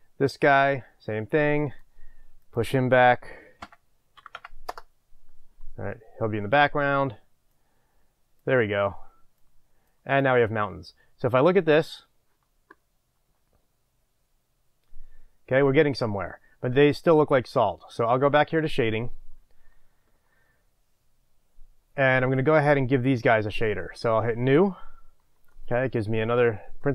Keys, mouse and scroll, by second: 0.5-10.2 drag, 4.7 Return, 11.7 click, 18.6 click, 22.3 click, 24.8 click, 25.9-26.9 middle drag, 26.0 scroll down 2.